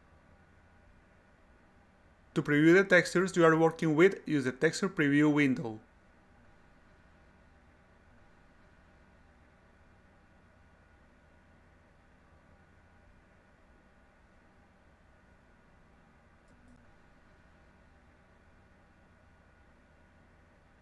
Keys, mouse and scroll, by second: 0.2 right click, 0.4 right click, 0.6-5.0 right drag, 5.0 click, 6.4 click, 7.3-8.1 drag, 8.9 click, 10.6 click, 10.8 click, 11.7 click, 13.4-14.7 drag, 15.0-16.4 drag, 16.8 click, 17.6 click, 18.8 3, 20.5-20.8 drag.